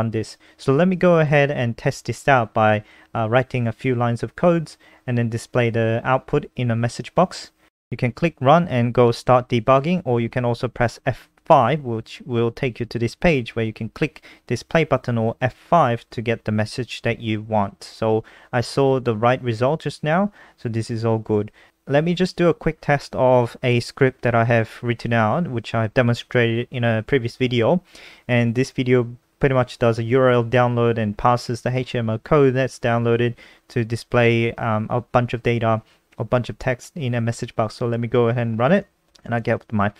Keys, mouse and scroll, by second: 0.0-2.9 typing, 3.0 End, 4.2-5.2 typing, 5.9 click, 6.3 ctrl+s, 7.6 click, 10.1 F5, 12.7 click, 18.7 ctrl+a, 19.1 Delete, 20.0 ctrl+s, 22.6 click, 22.9 ctrl+a, 23.4 ctrl+c, 23.8 click, 24.2 ctrl+v, 24.6-25.8 scroll up 5, 25.8 click, 28.5-31.5 scroll down 1, 31.7 click, 33.2 click, 34.5 click, 34.8-36.9 scroll up 7, 36.9 scroll up 1, 37.1 click, 37.2 F5, 38.9 click.